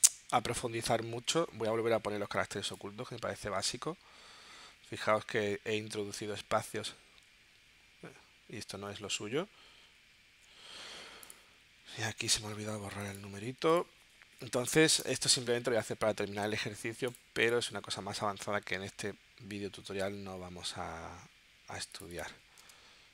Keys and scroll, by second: 9.8 shift+super+z, 14.6 BackSpace, 22.7 space.